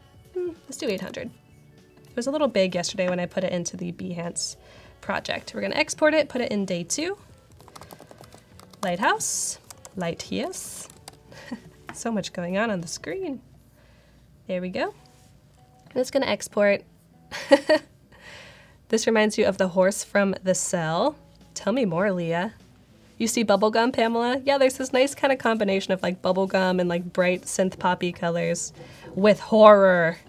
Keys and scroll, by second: 0.4-1.4 typing, 7.2-10.2 typing.